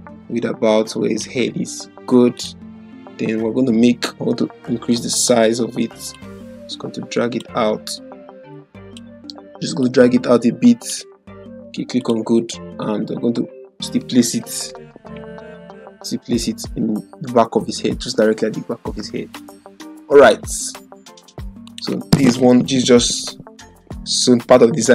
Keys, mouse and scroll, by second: 6.1-7.7 drag, 14.7 ctrl+t, 15.4-19.5 drag, 23.2 ctrl+0.